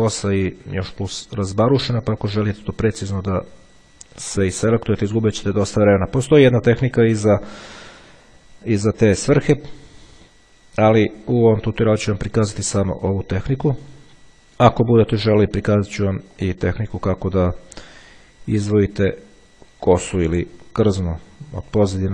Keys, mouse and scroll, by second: 1.0 click, 2.2 click, 3.3 click, 4.6-5.6 middle drag, 7.1 click, 8.8 click, 11.0 click, 12.0 click, 12.9 click, 14.4 click, 16.6 click, 18.1 click, 20.0 click.